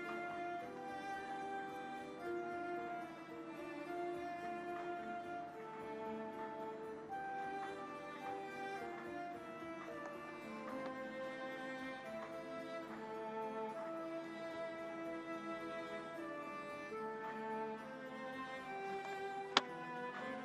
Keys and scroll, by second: 10.1 space, 15.2 ctrl+=, 17.4 ctrl+=, 19.0 space, 20.1 ctrl+=.